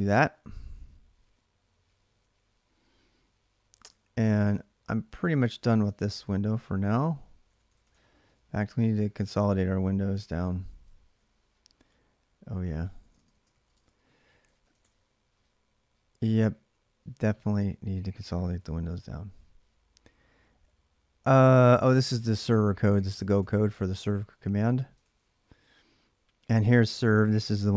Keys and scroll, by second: 1.7 ctrl+a, 2.0 ctrl+a, 3.8 ctrl+[, 4.3-6.0 typing, 6.1 ctrl+a, 6.3 ctrl+a, 7.2-8.1 typing, 9.9 ctrl+a, 10.1 ctrl+a, 12.7-15.1 typing, 17.2 ctrl+[, 17.3 ctrl+j, 17.5 k, 18.2 ctrl+a, 18.4 ctrl+a, 21.6 ctrl+[, 21.6-23.7 typing, 23.7 Return, 24.8 ctrl+a, 25.0 ctrl+a.